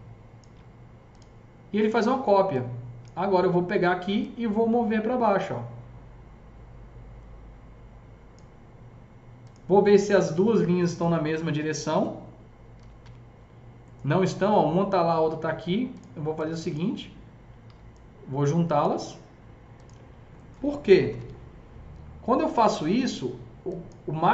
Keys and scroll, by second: 11.3 alt+q, 12.4-13.8 typing, 17.6 s, 20.8-21.6 typing.